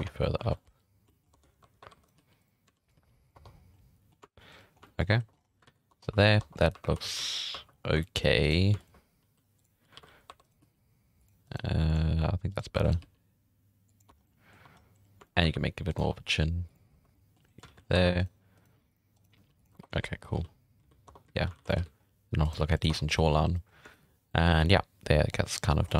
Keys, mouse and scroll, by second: 0.0 Tab, 0.2 scroll down 6, 0.2 middle drag, 0.4 alt+a, 0.5 middle click, 1.1 shift+middle drag, 1.2 scroll up 5, 1.3 Tab, 1.6-2.9 typing, 2.0 right click, 3.3 Tab, 3.5 scroll down 6, 3.7-4.5 middle drag, 4.7-5.1 scroll down 2, 4.8 shift+middle drag, 5.1 middle click, 5.3 scroll up 2, 5.7 alt+a, 5.9 Tab, 6.2 shift+middle drag, 6.4 Tab, 6.5 scroll up 5, 6.7 1, 7.0 shift+middle drag, 7.2 alt+a, 7.4 scroll up 2, 7.5 1, 7.7 scroll down 5, 8.0 shift+middle drag, 8.4 right click, 8.8 shift+right click, 9.2 m, 10.0 alt+a, 10.3 1, 10.4 right click, 10.6 g, 11.4 right click, 11.5 g, 12.5 right click, 12.7 2, 12.8 right click, 13.0 g, 14.1 Tab, 14.2 scroll down 1, 14.2-14.6 middle drag, 14.6 Tab, 14.7 scroll up 5, 15.2 shift+middle drag, 15.4 2, 15.9 right click, 16.0 g, 16.9 scroll down 2, 17.1-17.5 middle drag, 17.7 alt+a, 17.8 scroll up 1, 17.9-22.6 typing, 18.2 right click, 18.5 right click, 19.1 right click, 19.7 Tab, 21.0 Tab, 21.1 scroll down 1, 21.6 alt+a, 21.7 scroll up 2, 22.4 right click, 22.9 Tab, 23.0 scroll down 4, 23.1-23.4 middle drag, 23.7 scroll down 2, 23.9 shift+middle click, 24.0 scroll up 1, 24.2 scroll down 1, 24.3-25.4 middle drag, 25.7 shift+middle drag, 25.9 scroll up 4.